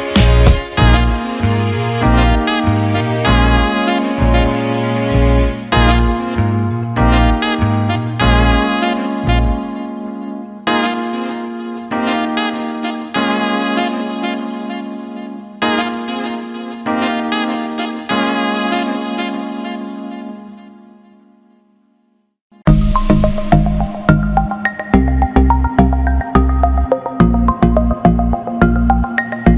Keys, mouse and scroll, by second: 0.0 e, 0.8 click, 2.9 s, 5.7-6.9 drag, 7.4 s, 10.1 alt+middle click, 10.9 click, 12.4 alt+middle click, 13.5 alt+middle click, 14.6 click, 16.1-17.1 drag, 21.4-23.6 drag, 24.5 alt+shift+middle click, 28.9 alt+middle click.